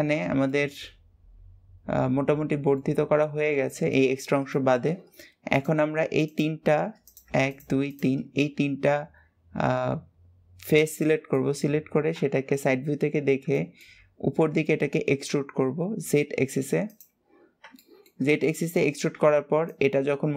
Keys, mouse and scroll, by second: 0.3-3.1 middle drag, 3.1-3.5 scroll down 1, 3.5-5.4 shift+middle drag, 5.4 click, 6.0 click, 6.8 click, 7.3 shift+click, 7.6 shift+click, 8.2-11.5 middle drag, 11.5-12.1 scroll up 1, 12.8-13.3 scroll up 2, 13.3 shift+middle click, 17.6 shift+middle click, 18.0-20.3 scroll up 2.